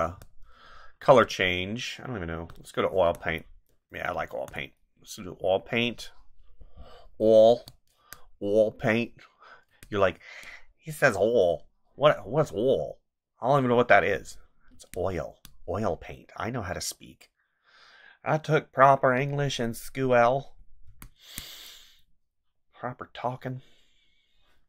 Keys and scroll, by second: 0.0 space, 7.5 space, 9.7 space, 14.7 space, 20.8 space.